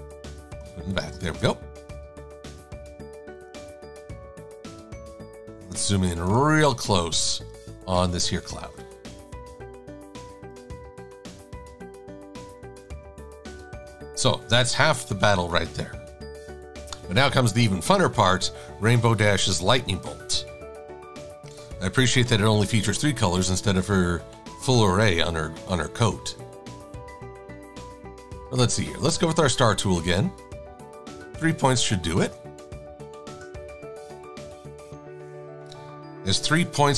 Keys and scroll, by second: 0.7 shift+super+[, 1.4 shift+a, 5.6 super+=, 5.8 super+=, 6.2 super+=, 11.2 shift+super+a, 12.2 super+-, 12.3 super+-, 12.7 super+-, 12.9 super+-, 13.1 super+-, 13.7 super+-, 35.8 -.